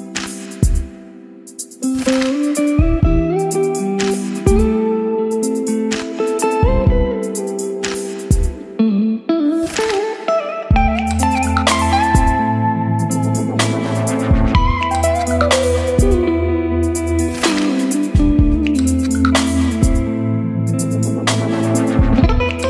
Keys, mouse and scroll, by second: 19.8-22.6 drag.